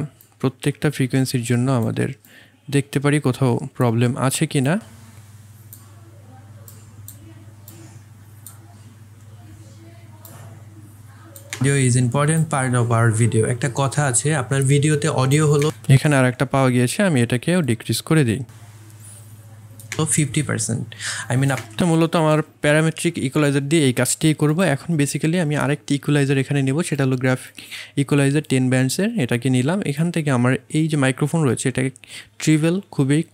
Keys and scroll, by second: 11.5 space, 15.6 space, 19.9 space.